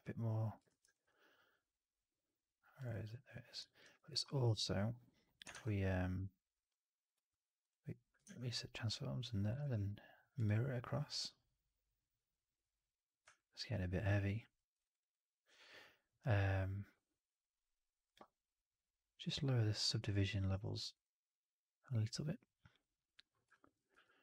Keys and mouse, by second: 0.6 shift+x, 0.8 alt+right click, 1.0-2.6 alt+drag, 3.5 alt+middle click, 3.7 alt+right click, 3.9 alt+click, 4.4 4, 5.4 shift+Tab, 8.1 shift+Tab, 9.5 alt+x, 12.0 click, 13.2-14.3 alt+right drag, 14.4 alt+middle drag, 14.7 alt+right drag, 14.9 alt+right click, 23.4 alt+middle drag.